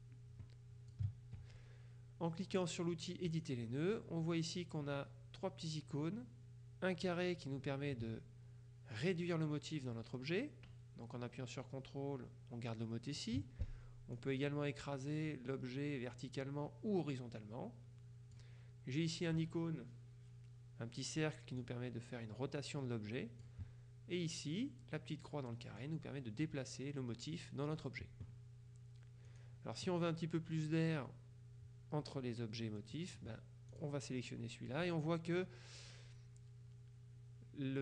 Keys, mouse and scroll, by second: 3.4 click, 7.5-13.8 drag, 14.2-18.9 drag, 21.7-24.0 drag, 25.9-28.3 drag, 29.4 click, 33.0 middle click.